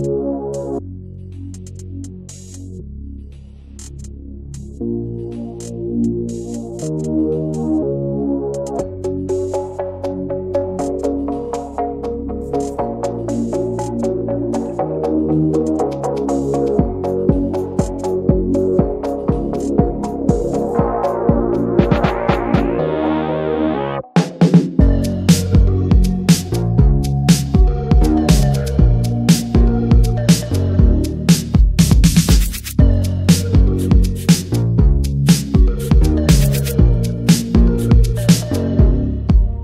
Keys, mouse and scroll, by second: 0.0-1.0 scroll up 3, 0.1 Tab, 0.3 middle click, 0.5 Tab, 0.8 shift+middle click, 1.0 middle click, 1.2 scroll down 2, 1.4 Tab, 1.5 Tab, 1.7 a, 2.0 right click, 2.4 shift+middle click, 2.7-4.0 scroll up 7, 4.0 click, 4.4 alt+shift+click, 4.5-4.9 scroll down 8, 4.9 ctrl+s, 5.6 right click, 5.8 Tab, 5.9 Tab, 6.1 a, 6.4 right click, 6.8 middle drag, 7.1 Tab, 7.1-7.5 middle drag, 7.5 ctrl+s, 7.7 scroll down 1, 7.8 /, 8.0-8.7 middle drag, 8.7 click, 9.2 click, 9.4 click, 9.6 shift+click, 10.1 ctrl+j, 10.3 click, 10.7 ctrl+a, 10.9 Tab, 11.4 a, 11.5 right click, 12.1 Tab, 12.3 click, 13.1 /, 13.4-13.8 middle drag, 13.8 Tab, 13.9 Tab, 14.0 middle drag, 14.2-15.3 scroll up 5, 14.4 shift+middle click, 14.7 Tab, 14.8 middle click, 15.3-15.9 shift+middle drag, 16.2 alt+shift+drag, 16.4-17.2 middle drag, 17.2-17.8 scroll up 3, 17.8 alt+shift+click, 18.0-18.3 scroll down 10, 18.3 shift+middle click, 18.5-20.2 scroll up 3, 20.2-20.5 right drag, 20.5 middle drag, 20.8 Tab, 21.0 Tab, 21.4 a, 21.7 a, 21.8 right click, 22.4 middle click, 23.0 Tab, 23.2 middle click, 23.4-23.9 scroll up 2, 23.5 shift+middle click, 23.9-24.4 middle drag, 24.4 Tab, 24.7-25.0 middle drag, 25.0 Tab, 25.1 middle click, 25.2-26.3 scroll up 8, 25.4 Tab, 25.8 shift+middle click, 26.3 Tab, 26.6-26.9 scroll down 5, 26.9 middle click, 27.1 /, 27.3-27.8 scroll down 1, 27.9-28.6 drag, 29.1 ctrl+j, 29.6 ctrl+a, 29.7 Tab, 30.3 a, 30.4-31.4 right drag, 31.4-32.3 scroll up 4, 32.3 click, 32.6 click, 32.9 l, 33.7 a, 34.3 a, 34.5 right click, 34.7 Tab, 34.8 scroll down 1, 35.0-35.4 middle drag, 35.4 ctrl+s, 36.0 click, 36.6 middle drag, 36.7 click, 36.9 middle click, 37.2 click, 37.5 ctrl+a, 37.7 middle click, 38.1 click, 38.9 click.